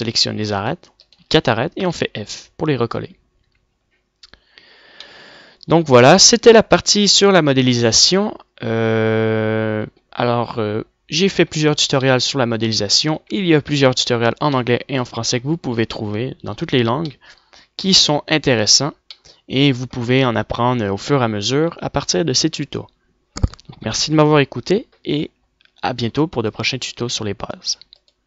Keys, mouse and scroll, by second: 1.6 f, 3.4 Tab, 7.0-7.9 middle drag, 8.6-9.1 middle drag, 9.1 click, 9.1 right click, 11.8-12.9 middle drag, 13.9 shift+c, 15.9 KP_Decimal, 19.4 middle click, 21.5 middle click, 23.5-26.8 middle drag.